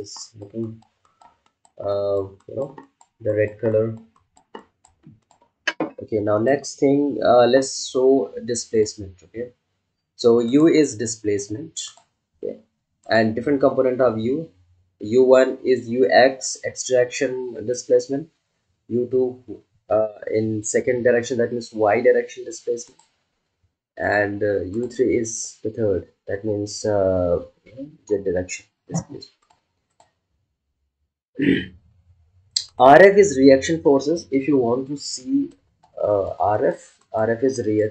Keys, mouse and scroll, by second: 8.7 click, 22.8 click, 22.8 click, 29.4 click, 29.4 click, 32.6 click, 35.5 ctrl+alt+click.